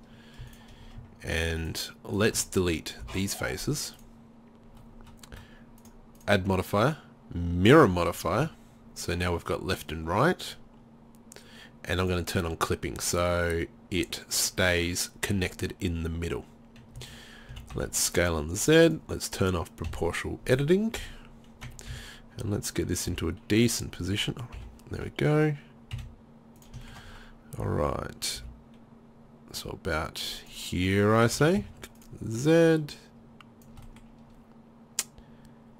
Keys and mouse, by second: 0.5-2.4 middle drag, 2.4-4.0 drag, 3.1 Delete, 5.8 click, 6.6-7.9 middle drag, 7.9 drag, 8.4 z, 17.0 a, 17.5 s, 19.9 o, 21.0 KP_3, 21.9 z, 23.1 g, 24.6 o, 26.0 s, 26.9 click, 28.4 g, 31.4 s, 34.3 drag.